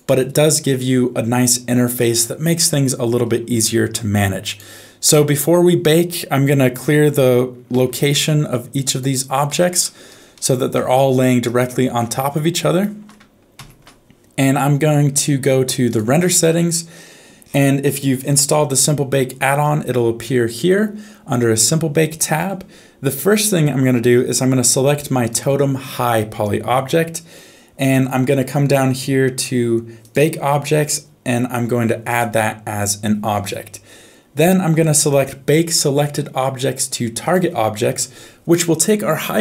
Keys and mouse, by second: 3.6 shift+middle click, 4.5 click, 7.8 alt+g, 8.9 click, 9.5 alt+g, 10.3 middle click, 11.7 middle click, 12.8 shift+middle click, 13.7 ctrl+s, 15.8 click, 30.0 click, 32.0 click, 37.3 click.